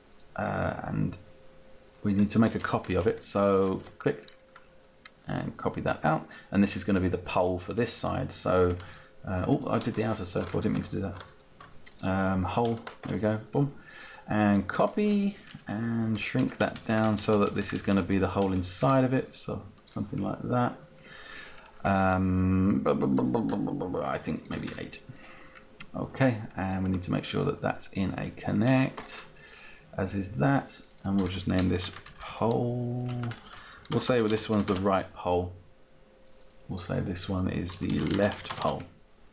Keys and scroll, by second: 10.0 ctrl+z, 15.9 Down, 16.4 Down, 24.6 Down, 25.1 Down, 31.2-34.7 typing, 35.1 Return, 37.6-38.9 typing.